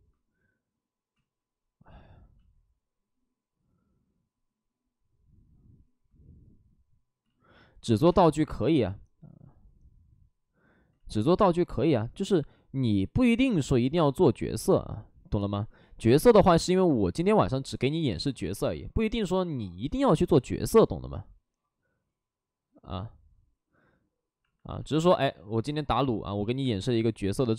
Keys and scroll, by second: 1.0 ctrl+z, 7.1 ctrl+z, 8.0 space, 10.8 ctrl+z, 14.3 ctrl+z, 19.8 ctrl+z, 20.2 ctrl+z, 24.7 alt+s, 25.2 alt+s, 26.0 alt+s, 26.5 space, 27.3 space.